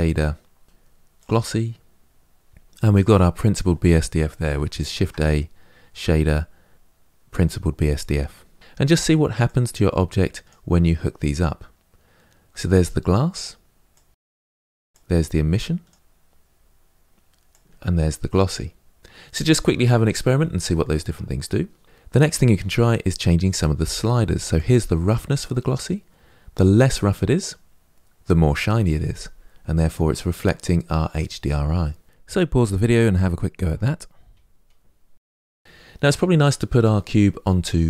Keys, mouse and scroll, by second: 2.7 click, 9.2 click, 13.7 click, 15.7-16.0 drag, 17.2-18.4 drag, 19.0 click, 24.6-35.6 drag, 35.6 ctrl+shift+z.